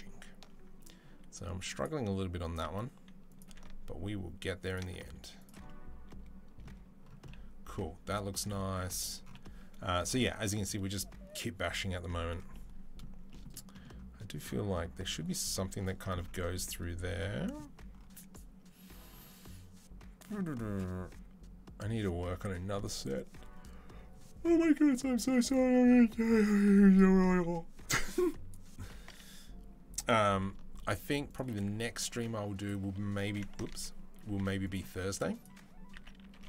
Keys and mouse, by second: 0.7-1.7 drag, 1.7-26.8 middle drag, 2.4 s, 3.2 g, 4.8 s, 26.8 click, 28.8 s, 30.1 g, 31.5 s, 33.6 ctrl+z, 34.0 s, 34.8 s.